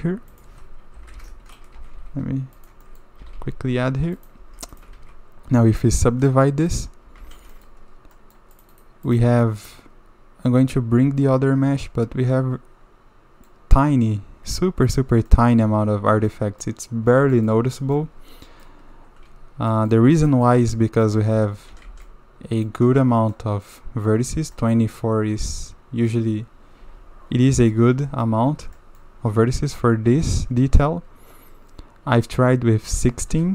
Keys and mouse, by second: 0.9 s, 1.7 g, 2.8 drag, 3.2 g, 4.4 Tab, 5.0 ctrl+2, 6.3-6.8 drag, 7.2 alt+a, 7.5 shift+middle drag, 8.1 middle drag, 8.7 click, 9.4-13.5 middle drag, 15.3-16.3 middle drag, 16.6 middle click, 17.3 shift+middle drag, 17.8 middle drag, 18.4 middle click, 19.7 middle drag, 20.2 shift+middle drag, 20.4-21.0 middle drag, 21.2 Tab, 21.7 a, 21.8 a, 22.0-22.6 middle drag, 23.3-23.6 middle drag, 24.5 middle click, 25.5 middle click, 25.9 click, 26.8 Tab, 27.7-28.2 drag, 28.8 drag, 33.3 KP_Divide.